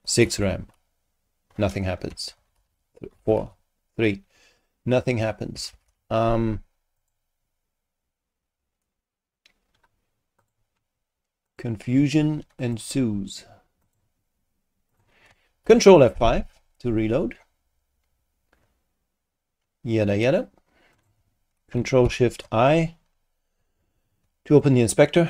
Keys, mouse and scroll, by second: 0.0-0.8 typing, 2.1 Home, 2.4 shift+Right, 2.5 shift+4, 3.2 shift+Left, 3.4 shift+3, 5.5 Home, 5.7 shift+End, 5.8 shift+Delete, 7.0 click, 10.4 click, 11.5 click, 12.6 ctrl+click, 12.7 ctrl+w, 13.8 click, 14.9 click, 15.6 ctrl+F5, 17.5-18.0 scroll down 2, 18.5-19.1 scroll down 4, 19.4-20.0 scroll down 4, 20.9 click, 22.0 ctrl+shift+i, 22.9 ctrl+shift+scroll up 3, 24.6 super+click.